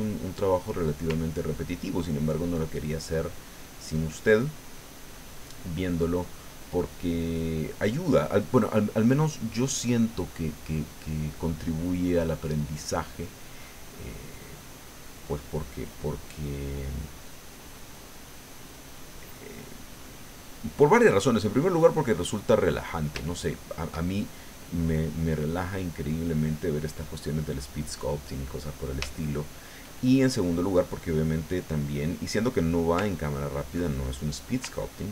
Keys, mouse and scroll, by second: 1.3-3.2 ctrl+drag, 3.4 ctrl+click, 4.5 click, 5.4-7.0 middle drag, 7.1 middle click, 8.5-11.2 drag, 11.6 click, 13.1 middle click, 14.0 middle click, 15.1-21.2 drag, 21.4-23.1 drag, 23.3 shift+middle click, 24.6-25.7 drag, 25.8-28.0 drag, 28.1 click, 29.1 shift+middle click, 31.1 middle click, 33.2 ctrl+click, 33.9 ctrl+middle click, 34.8 ctrl+click.